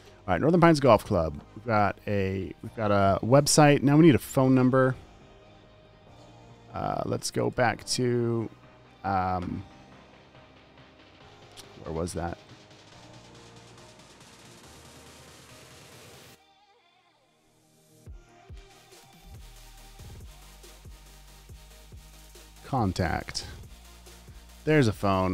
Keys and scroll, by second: 2.3 super+s, 6.3 super+w, 18.0-19.1 typing.